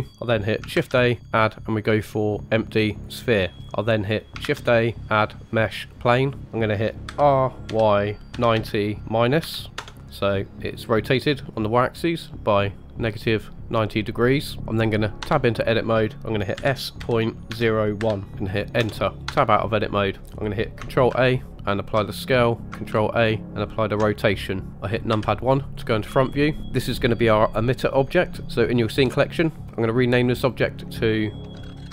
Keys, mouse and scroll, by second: 0.7 shift+a, 3.6-4.3 scroll up 3, 4.4 shift+a, 10.0-10.9 scroll down 2, 10.9-14.6 middle drag, 15.2 Tab, 16.5 s, 19.2 Tab, 21.1 ctrl+a, 22.9 ctrl+a, 25.1 KP_1, 26.2-26.5 shift+middle drag, 30.3 click, 30.4 click, 31.8 t.